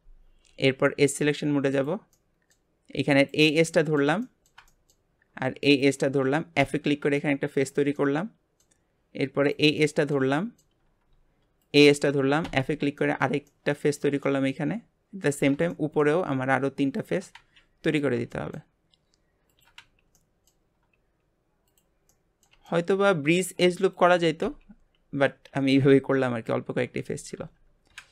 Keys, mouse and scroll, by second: 1.7 click, 2.1-3.2 middle drag, 3.2 click, 3.6-5.1 middle drag, 5.1 scroll up 2, 5.6 shift+click, 6.6 f, 7.1-9.4 shift+middle drag, 9.4 click, 9.8-10.8 middle drag, 10.8 scroll up 2, 11.6 shift+click, 12.4 f, 12.9-15.3 shift+middle drag, 15.3 click, 15.7-16.9 shift+middle drag, 16.9 shift+click, 17.3 f, 17.8 click, 18.3-19.5 shift+middle drag, 19.5 shift+click, 19.7 f, 20.1-21.6 middle drag, 21.6 click, 22.1-23.1 middle drag, 23.1-23.9 scroll up 2, 23.9 shift+click, 24.4 f, 24.9-27.0 scroll down 4, 25.5 alt+a, 27.0 Tab, 27.4 Tab, 27.9 KP_Divide.